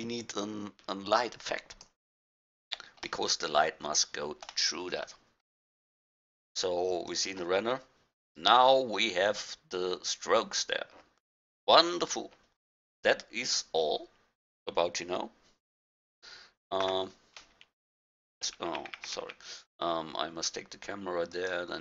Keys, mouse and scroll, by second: 6.4-8.4 drag, 13.7-15.6 middle drag, 15.6-17.0 middle drag, 19.1 F12, 19.1 Escape, 19.4 Escape.